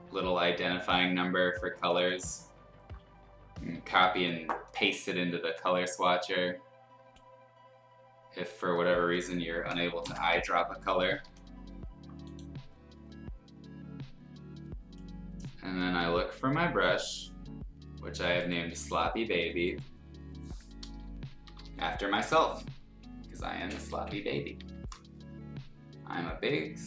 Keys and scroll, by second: 3.7 ctrl+c, 9.7 l, 10.0 ctrl+i, 11.2 b, 21.3-24.6 typing.